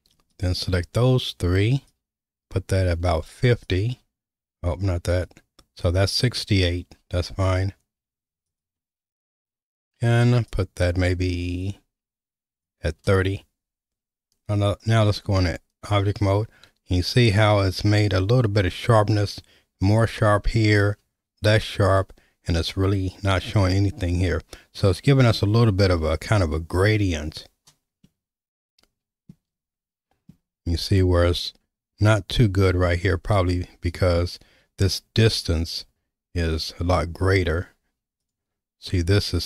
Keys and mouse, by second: 0.3 ctrl+click, 1.9-5.2 drag, 7.4 click, 8.5 ctrl+click, 10.6-12.7 drag, 15.2 Tab, 28.0-29.3 middle drag, 32.9 Tab, 38.2 click.